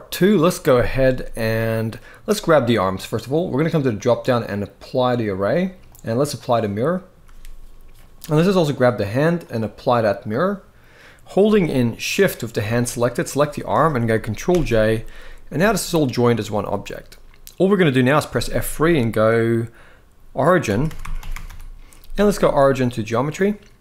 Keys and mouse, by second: 3.7-4.9 drag, 5.6-6.2 drag, 9.3-10.0 drag, 11.2 g, 11.8-12.3 right drag, 12.8 shift+click, 14.2 ctrl+j, 15.2 g, 16.1-17.2 drag, 18.0 F3.